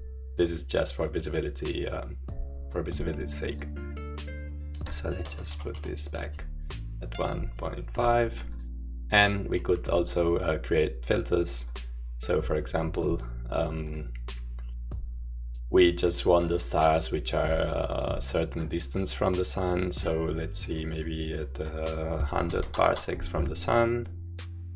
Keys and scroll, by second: 5.0-6.2 typing, 22.2-23.1 typing.